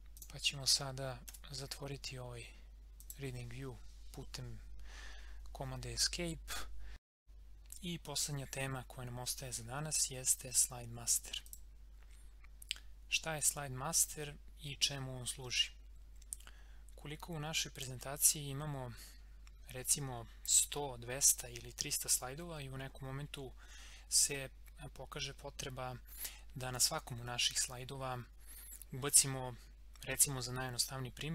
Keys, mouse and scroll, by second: 3.0 click, 7.2 click, 11.4 click, 17.8-22.8 drag.